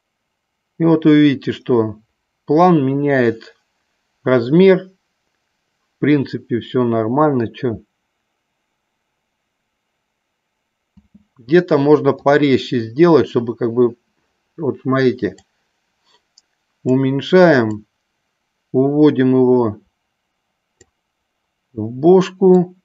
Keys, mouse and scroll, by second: 11.1 space, 12.7 click, 15.4-17.1 drag, 17.9-20.9 drag, 22.6-22.8 drag.